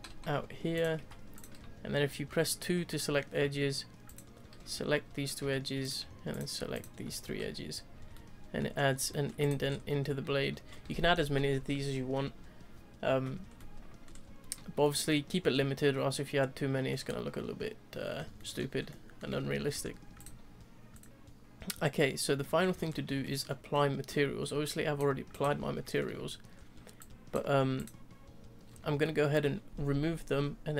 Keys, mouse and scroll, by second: 0.9 2, 1.3 click, 4.0 shift+click, 5.4 f, 5.8 click, 6.3 shift+click, 6.7 shift+click, 7.2 f, 7.5-7.9 scroll down 2, 7.9 Tab, 8.1-8.6 middle drag, 8.6-9.1 scroll down 5, 9.1 middle click, 9.4 click, 9.6-10.2 scroll up 6, 10.2-13.3 scroll down 2, 13.5-14.1 middle drag, 14.1-14.8 scroll down 2, 14.8-18.8 shift+middle drag, 18.8 scroll up 1, 18.9-20.1 middle drag, 20.1 click, 20.8-22.7 middle drag, 22.7-23.2 scroll down 2, 23.2-24.6 shift+middle drag, 24.6 click, 25.3 click, 25.8-26.5 shift+middle drag, 26.5-27.0 scroll up 1, 27.0 click, 27.7 click, 29.0-30.7 shift+middle drag.